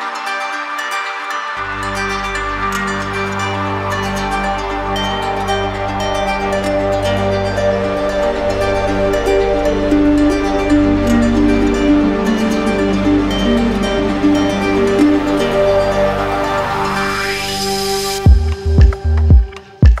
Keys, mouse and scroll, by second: 2.0 click, 2.7 click, 3.3 alt+click, 3.7 alt+click, 9.3 alt+click, 10.1 alt+right click, 10.9 right click, 14.3 click, 15.5 alt+click, 16.8 alt+click, 17.2 click.